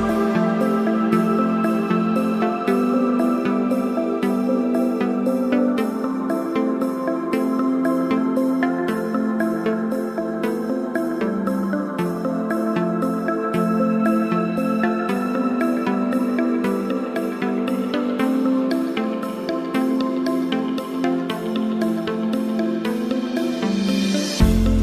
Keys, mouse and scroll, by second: 7.1 click, 9.0 click, 12.0 click, 16.7 click, 18.4 click, 19.7 click, 21.5 click, 24.4 click.